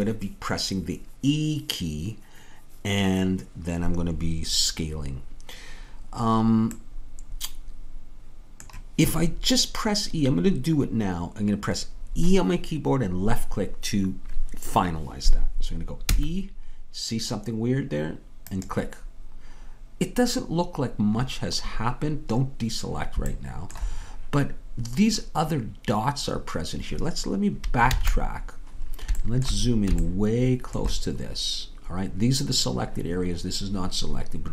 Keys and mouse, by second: 7.0-8.8 middle drag, 16.2 e, 27.9 ctrl+z.